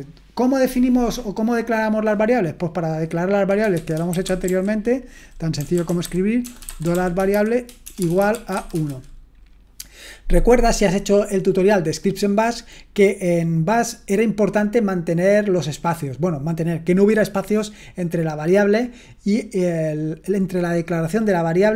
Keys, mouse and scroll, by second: 0.6-2.9 scroll down 1, 2.9-3.6 scroll down 1, 3.5-9.1 typing, 3.6 scroll down 1.